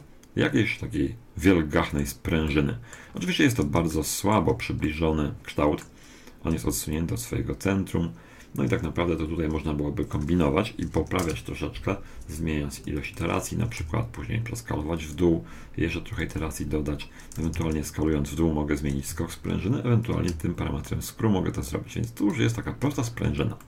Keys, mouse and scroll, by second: 2.5-6.6 middle drag, 6.7 middle click, 10.1-11.9 drag, 12.8-15.1 drag, 13.8 s, 16.1-18.2 drag, 17.4 s, 20.0-21.7 drag, 22.9-23.6 middle drag, 23.1-23.6 scroll up 1.